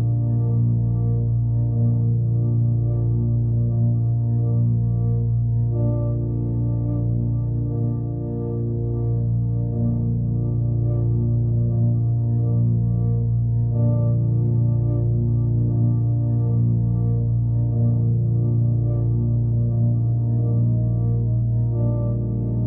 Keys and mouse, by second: 1.0 g, 4.1-13.0 drag, 14.5 ctrl+a, 15.6-17.4 right drag, 18.3 m, 21.3 f.